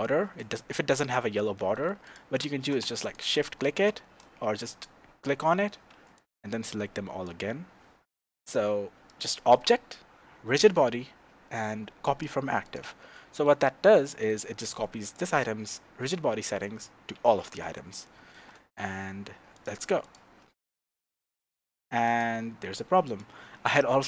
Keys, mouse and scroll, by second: 2.0 shift+click, 3.1 shift+click, 4.6 click, 6.1 click, 9.1-12.8 drag, 13.1-15.1 shift+middle drag, 13.6-13.9 scroll down 2, 15.1 click, 17.4-19.5 shift+middle drag, 18.5-19.5 scroll down 2, 19.5 click, 20.0 click, 23.0 click.